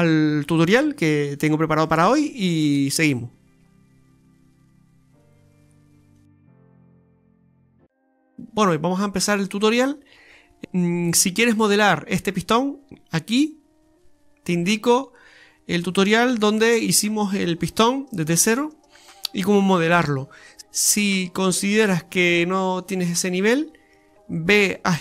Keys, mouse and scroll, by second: 0.1 KP_7, 0.5 scroll up 3, 0.7-1.9 scroll down 5, 1.9 middle click, 2.7-3.2 scroll up 3, 3.2 middle click, 3.8 right click, 4.0 alt+shift+right click, 4.4 right click, 4.6 alt+shift+right click, 5.1 middle click.